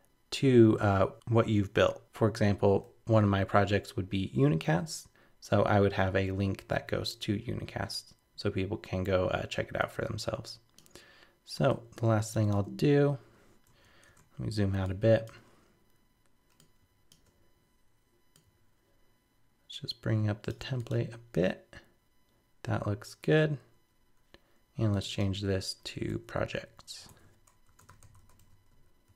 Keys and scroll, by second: 13.8 super+-, 27.1 shift+super+Left.